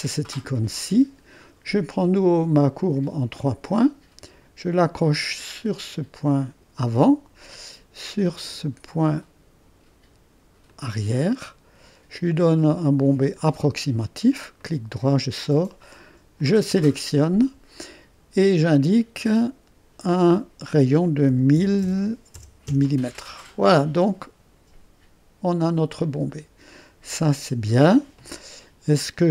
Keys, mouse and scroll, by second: 0.0 click, 0.5-3.1 drag, 4.0-6.4 drag, 6.7 click, 10.7 click, 13.4 click, 14.6 middle click, 16.4 click, 19.2 click, 21.1-22.9 typing, 26.2-27.3 drag.